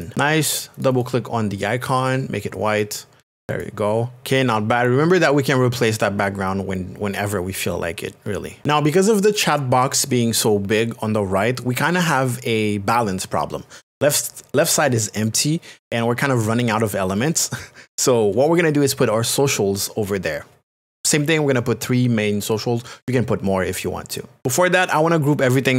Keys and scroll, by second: 4.2 space.